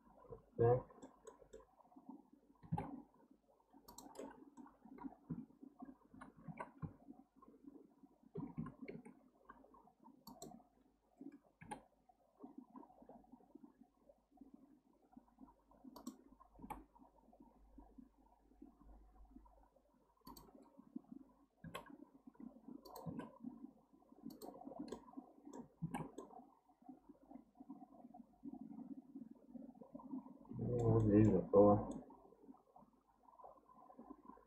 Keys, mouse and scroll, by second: 2.6 g, 4.2-5.3 middle drag, 5.3 KP_3, 6.1 KP_1, 6.5 alt+z, 6.8 KP_3, 8.6 ctrl+KP_3, 9.7 scroll up 1, 10.3 click, 10.7 scroll down 2, 11.6 g, 23.0 e, 24.7 scroll down 3, 24.9 middle click, 25.8 alt+z, 26.2-29.2 middle drag, 31.0 shift+middle click, 31.6-31.9 scroll up 4, 31.9-34.4 middle drag.